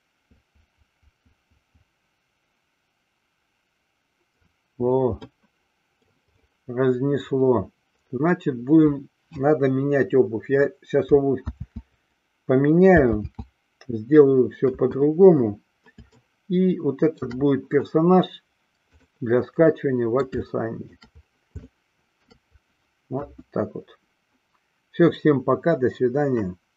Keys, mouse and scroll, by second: 5.5-6.3 middle drag, 12.1 ctrl+z, 13.9 ctrl+z, 14.9 KP_1, 16.5-17.5 shift+middle drag, 19.9-20.4 middle drag, 20.6-21.1 shift+middle drag, 21.9 shift+middle click, 23.3 KP_1.